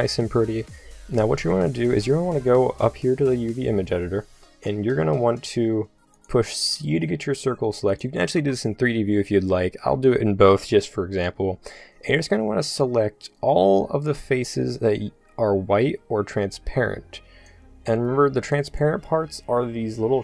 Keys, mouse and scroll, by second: 4.8 c, 6.7 c, 8.4 c.